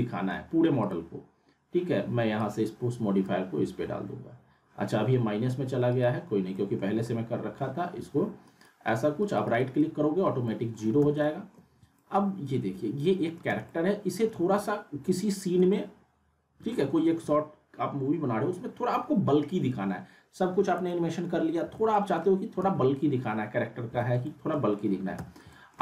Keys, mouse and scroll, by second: 0.8-3.3 drag, 4.5-5.9 scroll up 1, 5.9 right click, 6.5 middle click, 7.0 middle click, 7.0-7.7 alt+middle drag, 8.5 right click, 10.5 alt+middle click, 11.0 z, 11.2 alt+middle click, 11.7 scroll up 2, 12.0-13.5 alt+middle drag, 13.5 z, 13.7-14.6 alt+middle drag, 15.7-17.2 alt+middle drag, 17.2 z, 19.7 z, 20.9-21.5 alt+middle click, 21.6 z, 21.9 alt+middle click, 22.6 z, 24.2 alt+middle click, 24.8 scroll up 1, 25.2 z, 25.5 alt+middle click.